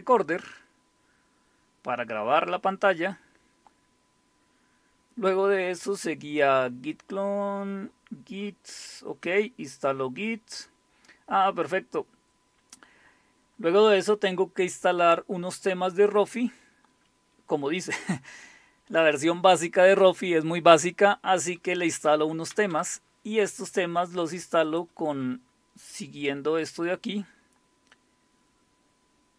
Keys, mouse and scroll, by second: 0.0-1.7 scroll down 2, 1.7-2.5 scroll down 1, 3.1-4.2 scroll down 2, 4.7-6.9 scroll down 2, 8.9-9.6 scroll down 2, 9.6-10.7 scroll down 1, 10.7-11.8 scroll down 1, 11.8-12.9 scroll up 2, 17.0 typing, 19.0-19.7 typing, 21.4-22.1 typing, 22.5 Down, 22.7 Down, 24.7 click, 26.2-28.1 scroll down 1.